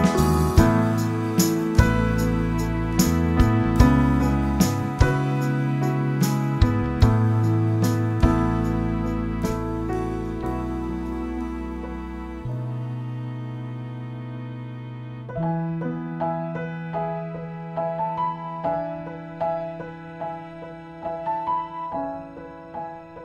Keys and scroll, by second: 17.2 8, 19.7-21.2 typing.